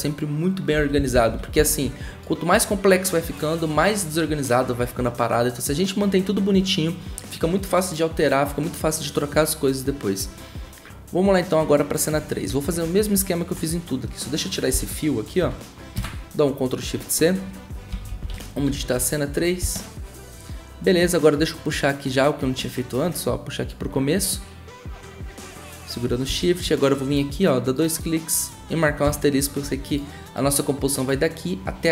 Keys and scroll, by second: 0.7-1.5 typing, 14.7 Delete, 16.0 ctrl+shift+c, 17.7-19.9 typing, 26.3 v, 29.0 *.